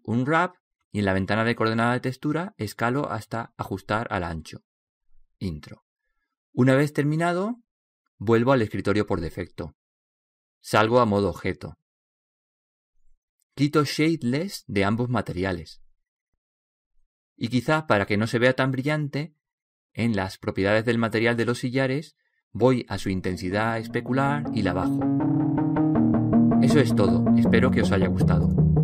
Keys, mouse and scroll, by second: 3.8-6.8 drag, 10.8 click, 12.2 Tab, 12.6 Tab, 14.3-23.4 drag, 24.0-25.7 drag.